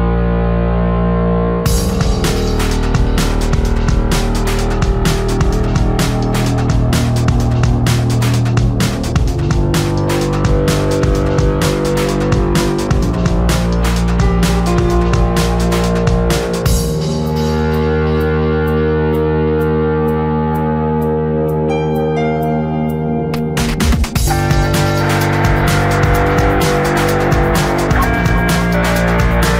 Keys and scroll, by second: 8.9 space.